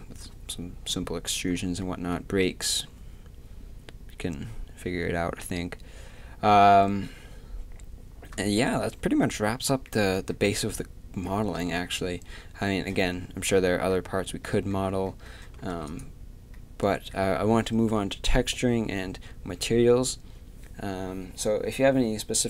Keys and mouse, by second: 15.7 ctrl+s.